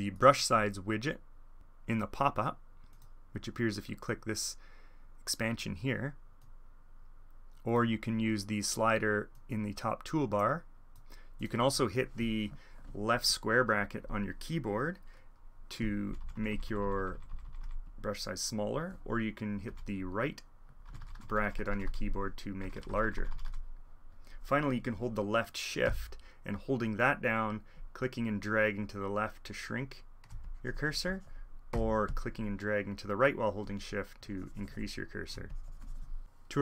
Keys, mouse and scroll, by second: 1.8 click, 2.8 click, 6.3-9.3 drag, 13.2 click, 16.1 [, 16.2 [, 17.3 [, 17.8-18.9 drag, 19.6 ], 19.9 click, 20.8-21.5 ], 21.9-26.2 drag, 22.6 ], 27.7 shift+click, 30.2-31.4 shift+drag, 35.4 click.